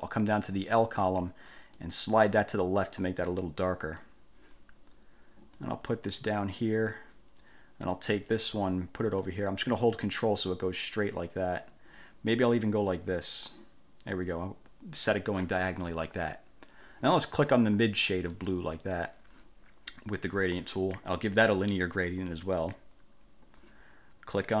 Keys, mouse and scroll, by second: 1.9-4.4 drag, 5.7-7.2 drag, 8.1-15.8 drag, 18.6 click, 22.8 click.